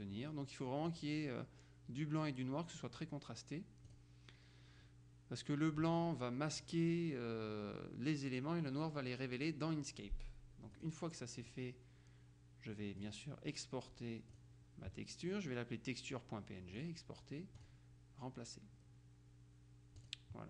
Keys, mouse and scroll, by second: 0.4-1.5 drag, 4.0 click, 10.8 click, 11.6 click, 13.1 click, 14.4 click, 16.8 click, 17.6-20.4 drag.